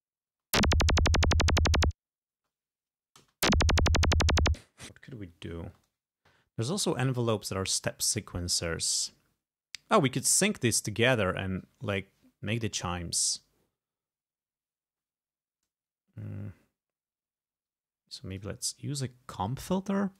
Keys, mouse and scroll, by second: 0.4 space, 2.4 space, 3.3 space, 4.7 space, 7.1 click, 18.4 click.